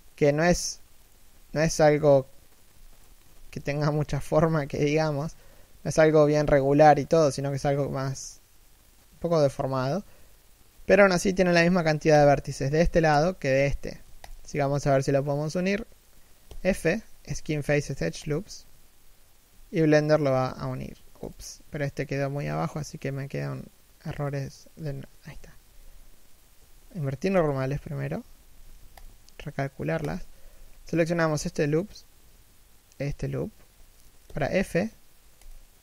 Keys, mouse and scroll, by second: 0.2 alt+right click, 2.7 alt+shift+right click, 3.9-4.3 scroll up 1, 4.3 alt+shift+middle click, 4.6-5.0 alt+shift+scroll down 1, 5.0-5.7 scroll up 1, 6.2 3, 6.6 1, 7.2-7.6 scroll down 1, 7.6 shift+middle click, 11.8 alt+right click, 14.0 alt+shift+right click, 16.2 f, 21.0 right click, 22.1 l, 24.5 a, 26.3 ctrl+n, 27.2 z, 28.3 a, 28.7 alt+right click, 29.7 alt+shift+right click, 30.2 z, 33.4-34.0 scroll down 1, 34.0 f.